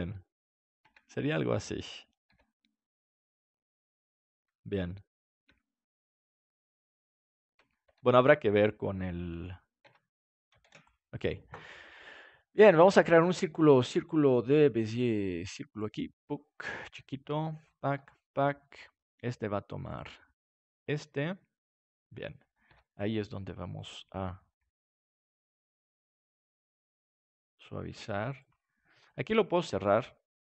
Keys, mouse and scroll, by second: 0.8 Tab, 1.8 right click, 2.2 g, 5.5 Tab, 7.5 Tab, 9.8 Tab, 10.6 ctrl+s, 13.7-15.1 drag, 15.6-17.4 drag, 16.8 s, 18.1 click, 18.1 right click, 20.0-22.6 drag, 22.6 Tab, 22.9-25.3 right drag, 24.5 g, 25.3 click, 28.3-30.1 drag, 29.0-30.4 right drag, 29.3 g.